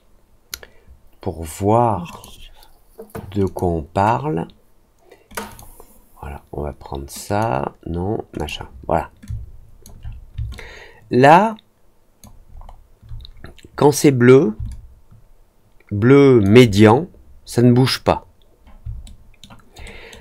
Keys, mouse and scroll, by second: 2.0 click, 3.4 click, 5.2 click, 5.4 click, 7.2 click, 8.3 click, 9.2 click, 10.5-12.1 alt+drag, 12.5 alt+middle click, 14.6-16.4 alt+drag, 19.0 alt+middle click, 19.8 alt+middle click.